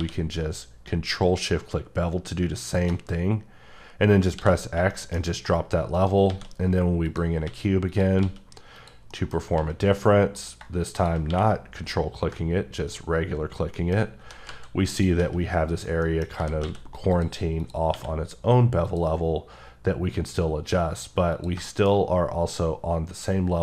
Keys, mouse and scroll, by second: 0.0 q, 2.6 shift+click, 4.4 x, 4.9 shift+middle click, 5.2 scroll up 2, 6.0 shift+right click, 6.3 shift+a, 7.1 click, 7.4 s, 7.9 click, 8.2 s, 8.8 click, 9.1 middle click, 9.6 s, 10.4 click, 11.3 q, 12.7 click, 13.5-14.2 scroll down 3, 13.7 middle click, 14.2 g, 14.5 z, 14.9 click, 15.2 s, 15.7 click, 16.0 middle click, 16.4 g, 16.6 x, 17.1 click, 17.6 click, 17.9 q, 18.8 click, 21.6 shift+middle click, 22.0-22.6 scroll up 2, 23.4-23.6 scroll up 2.